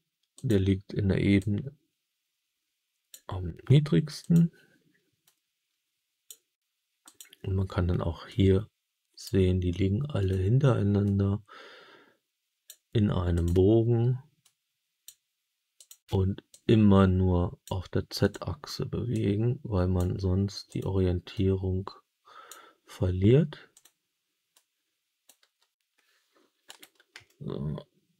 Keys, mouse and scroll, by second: 0.3 click, 1.3-3.0 drag, 4.1 click, 5.1-6.2 drag, 6.9 click, 8.2 click, 10.1 click, 11.0-12.6 drag, 13.2 click, 14.3 click, 15.7 click, 16.4-17.6 drag, 18.1 click, 19.0 click, 20.6 click, 21.2-22.4 drag, 23.6 click, 24.5 click, 25.3 g, 26.6 right click, 27.2-28.1 alt+middle drag.